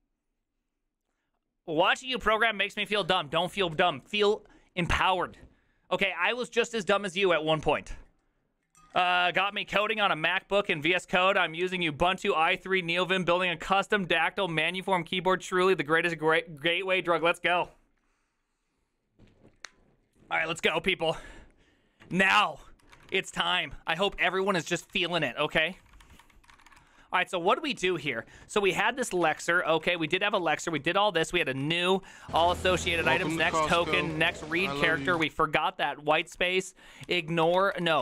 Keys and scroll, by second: 22.2 alt+{, 22.7-38.0 typing, 26.5 ctrl+c, 26.6 ctrl+:, 26.7 Return, 26.8 ctrl+u, 31.5 ctrl+d, 32.5 ctrl+c, 32.8 Return, 32.9 ctrl+d, 33.3 ctrl+d.